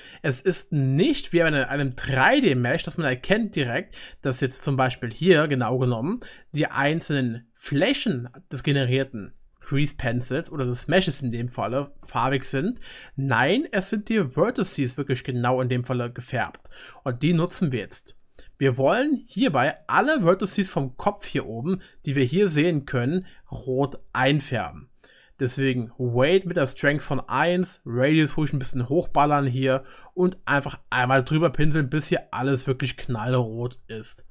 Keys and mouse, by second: 11.1-19.7 middle drag, 17.8-19.7 drag, 17.8-19.7 right drag, 20.0 click, 20.0 middle click, 20.0 right click, 21.7-34.3 middle drag.